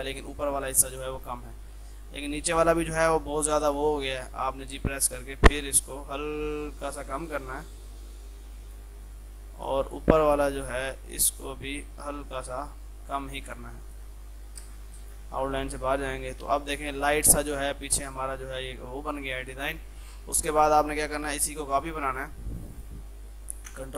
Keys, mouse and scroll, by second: 0.7 shift+F2, 1.0 ctrl+click, 1.9 F3, 2.5 click, 3.8 g, 4.7-13.5 drag, 14.7 space, 15.1 ctrl+click, 15.5 shift+F2, 20.5 F3, 21.2 ctrl+click, 21.9-22.6 typing, 23.6 ctrl+c.